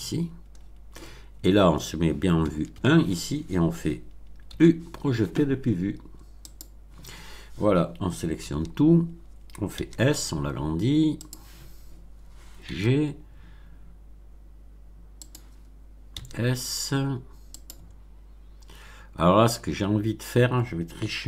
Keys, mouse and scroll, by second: 0.1-0.8 scroll down 2, 2.4 1, 4.4 u, 6.4 click, 8.4 a, 9.7 s, 11.1 click, 12.6 g, 15.2 click, 16.0 s, 17.5 click, 17.9 scroll down 2.